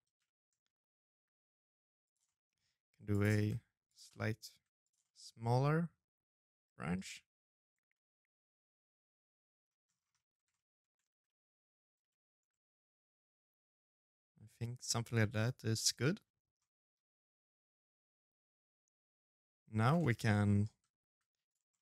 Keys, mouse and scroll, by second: 1.0 middle click, 1.4 s, 2.1 g, 2.8 middle click, 2.9 middle click, 3.2 r, 3.8 middle click, 6.5 scroll down 2, 6.7 middle click, 8.3-8.6 scroll down 1, 8.9 middle click, 8.9 scroll down 7, 9.3 shift+middle click, 9.8 ctrl+s, 10.0 middle click, 10.8 shift+middle click, 11.2 middle click, 16.3 middle click, 18.6 Tab, 18.8 scroll down 2, 19.0 middle click, 19.8 g, 20.5 middle click, 20.9 shift+d.